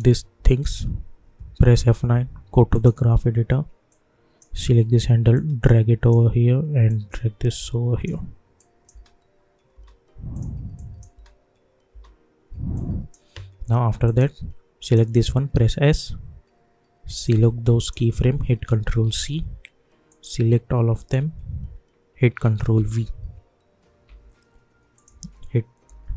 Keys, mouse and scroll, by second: 1.7 F9, 2.7-6.8 drag, 6.8-8.5 drag, 8.9 space, 10.3 click, 11.1 space, 12.7-14.0 drag, 15.5 s, 17.2-19.0 drag, 19.0 ctrl+c, 20.1 click, 20.9 shift+click, 22.7 ctrl+v, 24.0 u, 24.9 click, 25.1 u, 25.8 u.